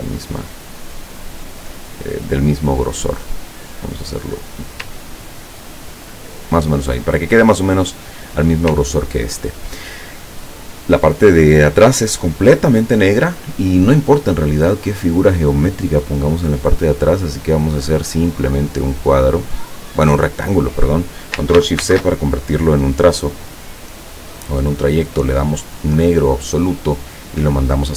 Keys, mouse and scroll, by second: 0.5 click, 1.3 click, 1.9 click, 2.6 click, 3.3 click, 4.9-6.7 ctrl+drag, 9.0-9.6 ctrl+scroll down 2, 14.5 click, 17.4-20.3 drag, 21.9 ctrl+shift+c, 24.3 click, 26.2 click, 27.1 click.